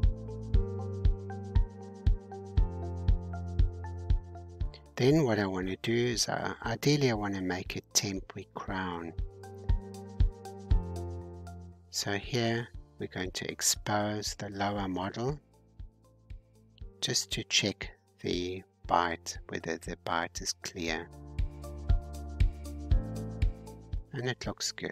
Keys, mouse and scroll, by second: 0.0-0.6 scroll down 1, 2.3-3.5 drag, 3.5 alt+h, 5.9-11.6 drag, 13.4-19.1 drag, 19.3-20.9 middle drag, 20.9-22.1 scroll up 2, 22.1-22.7 scroll up 1, 22.7 click, 23.7-24.9 middle drag.